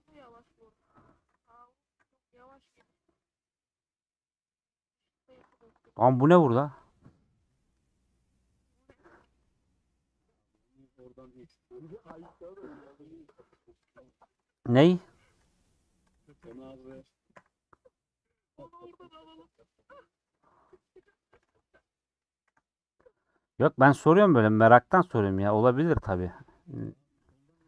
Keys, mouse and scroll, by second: 0.0 middle click, 0.9 KP_Add, 2.9 x, 3.2-5.6 middle drag, 5.6 ctrl+z, 6.0-13.9 middle drag, 13.9 x, 14.1 middle click, 14.7 1, 15.1 2, 15.5 Left, 16.1 click, 17.0 click, 17.3 f, 17.8-19.1 middle drag, 19.1 scroll up 1, 19.4-21.1 middle drag, 21.1 click, 21.3 ctrl+x, 22.1 click, 22.5 ctrl+x, 22.7-24.6 middle drag, 24.6 click, 25.0-27.6 click.